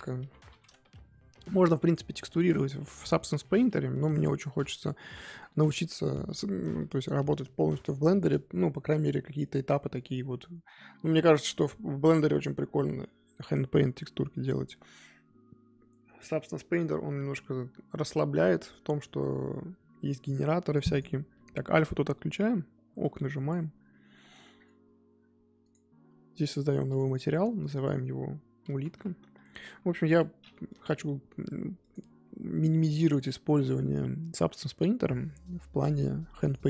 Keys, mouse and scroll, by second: 27.1-27.6 drag, 30.7-36.6 drag.